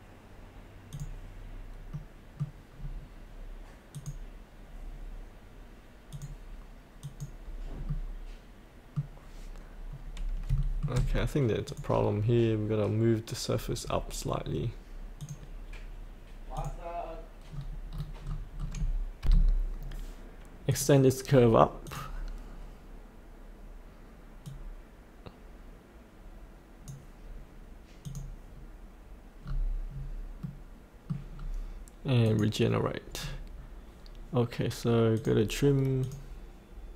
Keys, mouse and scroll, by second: 1.9 middle click, 2.8 scroll down 1, 3.9 click, 7.8 middle click, 8.9-10.4 scroll up 1, 10.5 shift+middle click, 11.7 click, 17.5-18.7 scroll down 1, 19.2 F8, 19.8 scroll down 1, 20.7-27.2 drag, 29.4 scroll up 1, 30.4 middle click, 31.3-32.2 scroll down 1, 32.2 click, 33.2 scroll down 1, 35.2 click.